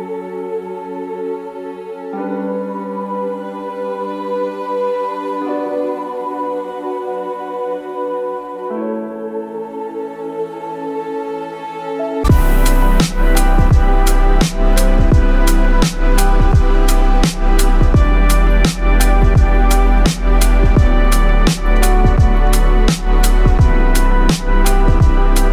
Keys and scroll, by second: 0.0-7.6 typing, 9.8-13.1 typing, 14.5-16.2 typing, 18.6-22.9 typing, 24.2-25.5 typing.